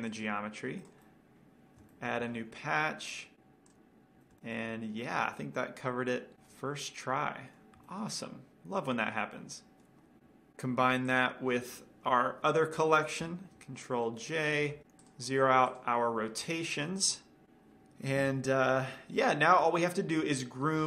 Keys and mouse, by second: 0.1 r, 0.7-2.5 drag, 1.3-2.5 right drag, 1.4-3.8 middle drag, 2.7 shift+a, 4.4-5.1 middle drag, 6.4-8.3 drag, 6.4-10.2 middle drag, 10.2-11.3 drag, 11.5-13.5 drag, 13.8 ctrl+j, 15.0-15.7 drag, 17.4 alt+r, 17.6 alt+g, 18.6 KP_Decimal, 19.5-20.8 middle drag.